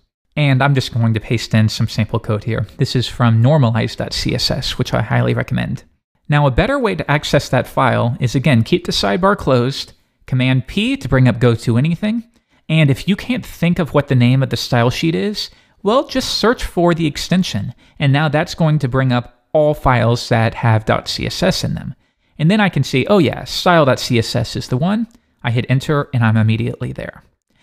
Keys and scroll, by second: 8.2 super+k, 8.4 super+b, 10.7 super+p.